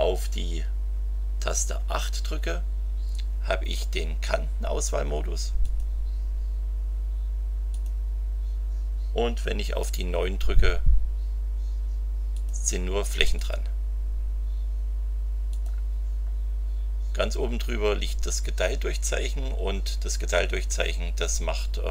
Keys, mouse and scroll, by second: 1.5 KP_8, 5.6 click, 7.7 click, 10.3 KP_9, 12.3 click, 13.3 click, 15.5 click, 18.8 KP_Divide.